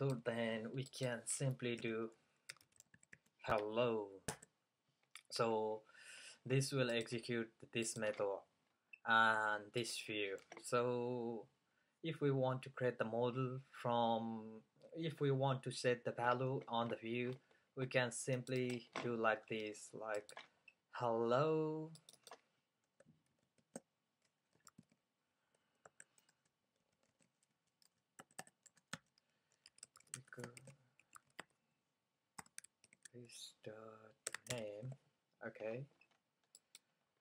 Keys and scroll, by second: 1.9-3.7 typing, 23.4-25.4 typing, 26.9-27.8 typing, 29.0 fn+Up, 29.5-35.4 typing, 36.7-37.2 typing.